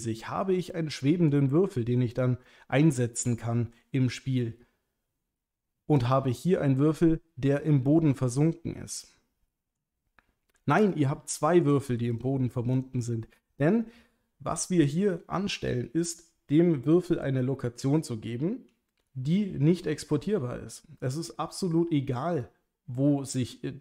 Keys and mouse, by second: 0.8-1.3 middle drag, 2.2 click, 2.4-3.7 middle drag, 6.0 click, 7.9-9.8 middle drag, 10.8 click, 11.7 click, 12.1 click, 12.7 click, 13.4 click.